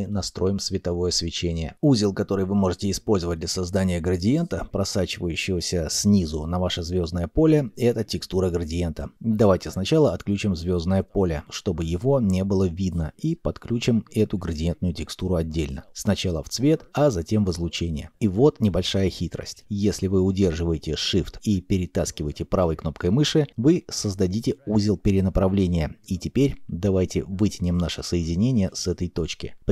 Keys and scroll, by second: 7.4-8.8 typing.